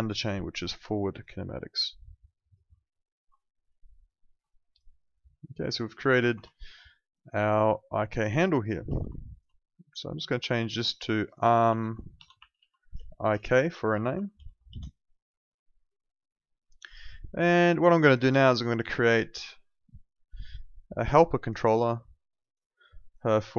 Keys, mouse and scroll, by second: 3.2 Escape, 4.0 alt+middle click, 4.5 alt+click, 6.2 ctrl+z, 6.5 alt+middle click, 6.7 alt+right click, 6.9 alt+click, 8.8 ctrl+z, 9.1 alt+click, 10.1 click, 11.2-14.8 typing, 16.2 alt+click, 17.0 alt+middle click, 17.3 alt+right click, 17.5 alt+click, 18.2 alt+middle click, 18.4 alt+right click, 18.7 alt+click, 20.3 alt+right click, 20.6 alt+middle click, 21.0 alt+click, 22.1 alt+middle click, 22.4 alt+right click, 22.6 alt+click, 23.2 alt+middle click, 23.4 alt+right click.